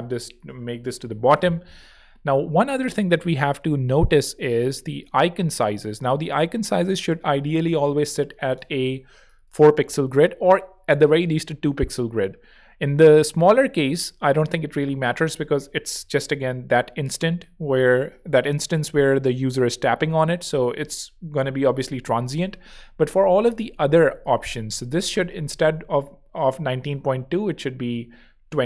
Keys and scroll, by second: 4.7 z, 27.9 Escape.